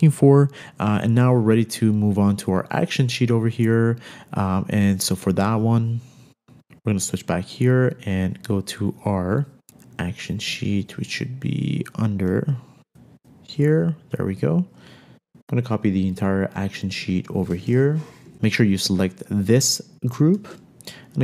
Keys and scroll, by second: 18.4 shift+Up, 20.9 super+c.